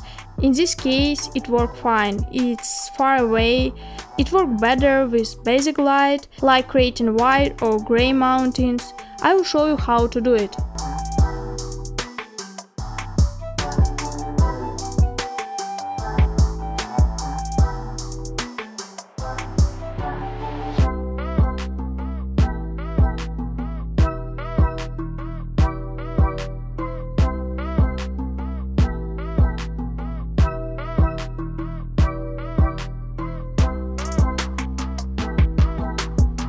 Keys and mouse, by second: 2.8-4.7 middle drag, 16.7-17.7 drag, 18.9-21.4 drag, 23.4-24.8 drag, 26.1 middle click, 31.8 ctrl+z, 34.5-36.4 drag.